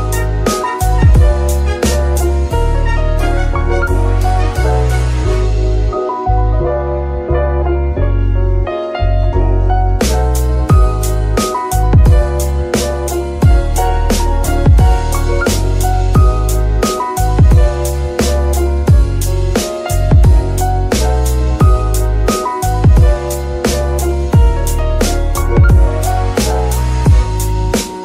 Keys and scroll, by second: 0.0-0.4 typing, 2.1 b, 2.2 k, 8.7 Return, 10.6 g, 10.8 Escape, 13.5 ctrl+c, 15.7 ctrl+v, 17.7 shift+g, 19.3 Escape, 27.5 x.